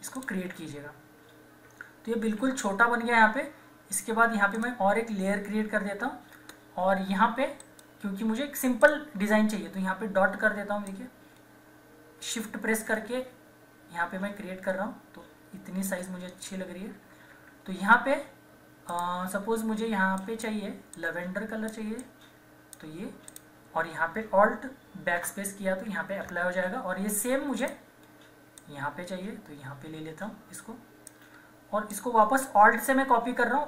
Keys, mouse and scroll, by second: 1.3 typing, 2.4 ctrl+=, 4.5 click, 7.6 right click, 8.8-16.8 drag, 16.8 Right, 18.9-23.3 drag, 25.2 alt+BackSpace, 26.4 ctrl+d, 27.6 click, 28.6-33.6 alt+drag, 31.9 typing.